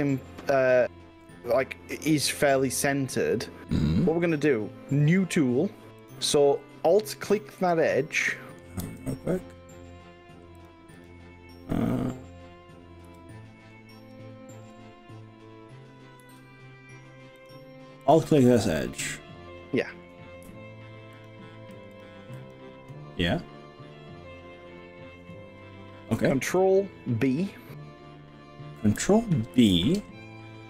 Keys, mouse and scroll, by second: 4.2 scroll down 2, 6.0 click, 7.6 g, 8.8 x, 10.6 click, 11.0 click, 13.2 g, 16.2 z, 17.4 click, 18.0 click, 21.2 alt+click, 22.4 alt+click, 29.6 ctrl+b.